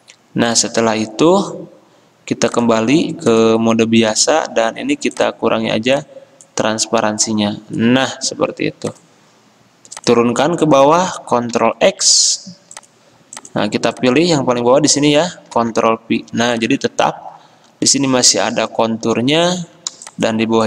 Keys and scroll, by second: 11.7 ctrl+x, 14.7 ctrl+z, 15.7 ctrl+f.